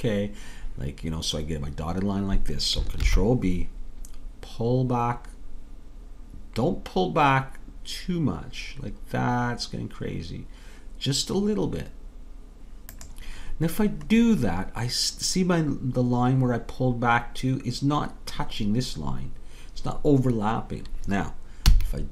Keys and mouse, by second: 3.1 ctrl+b, 21.7 a.